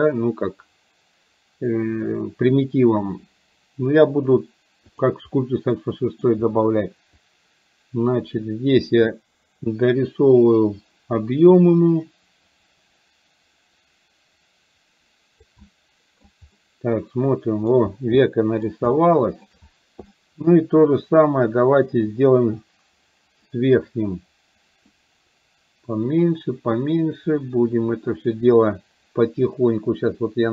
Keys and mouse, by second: 5.0 click, 5.7 middle click, 7.2-15.6 drag, 16.6-17.6 middle drag, 18.2 middle click, 19.0 shift+middle click, 20.2 middle click, 21.0-30.5 drag.